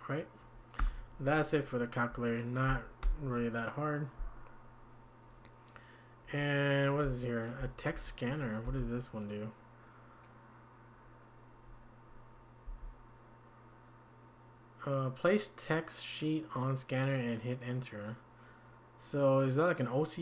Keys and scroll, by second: 0.8 Return, 7.0 Down, 7.9 Down, 7.9 Up, 8.7 Return, 12.6 Down.